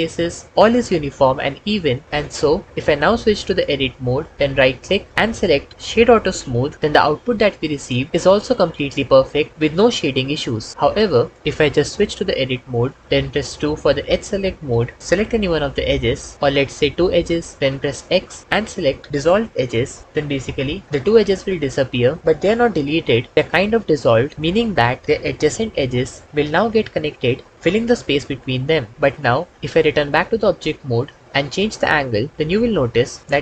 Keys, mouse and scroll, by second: 3.8 Tab, 5.1-6.4 drag, 8.8-10.0 drag, 12.5 Tab, 14.7 2, 18.1 x, 30.1 Tab.